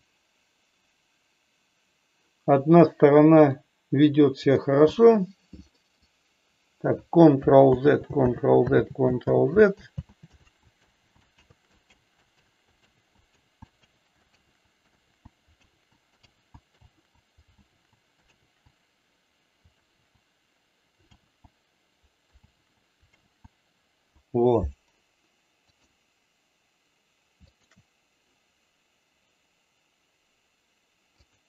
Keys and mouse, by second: 3.4 click, 4.4 click, 5.8 middle click, 7.8 ctrl+z, 8.3 ctrl+z, 8.9 ctrl+z, 9.4 ctrl+z, 9.8 ctrl+z, 10.9 ctrl+z, 11.4 ctrl+z, 12.4 ctrl+z, 12.9 ctrl+z, 13.9 ctrl+z, 14.4 ctrl+z, 15.0 ctrl+z, 15.7 ctrl+z, 16.3 ctrl+z, 16.9 ctrl+z, 17.7 ctrl+z, 18.3 ctrl+z, 19.8 ctrl+z, 21.2 ctrl+z, 22.4 ctrl+z, 23.3 ctrl+z, 25.5 click, 27.4 shift+click, 31.2-31.4 drag.